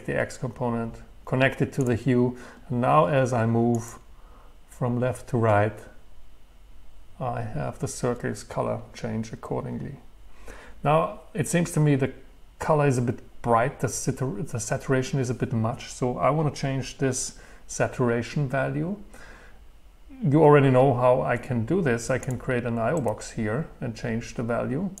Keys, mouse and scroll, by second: 3.8 Right, 22.3 click, 23.0-25.0 middle drag.